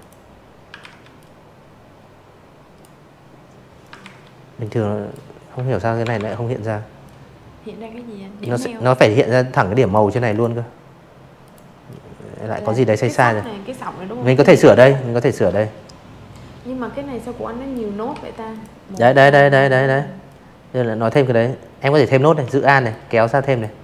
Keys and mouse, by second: 0.9 ctrl+z, 1.6 click, 3.9-5.4 drag, 6.2 z, 6.5 click, 7.0 v, 7.2 click, 8.3 click, 8.8-10.3 drag, 12.2-14.7 drag, 15.1 v, 15.4 click, 15.8 click, 17.2 click, 19.8 alt+click, 20.9 alt+click, 22.0 alt+click, 23.4 alt+click.